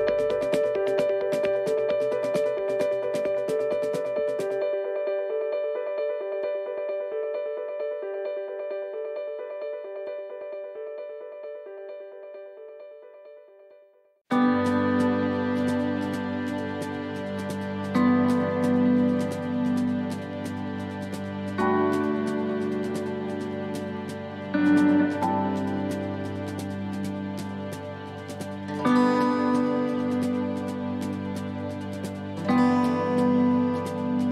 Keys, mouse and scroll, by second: 2.0 s, 4.3 shift+middle click, 4.8 middle click, 6.4 e, 9.5 middle click, 10.4 e, 11.9 s, 14.7 middle click, 16.5 ctrl+r, 18.9 s, 20.3 middle click, 20.6 a, 33.6 middle click, 34.0-34.3 scroll down 2.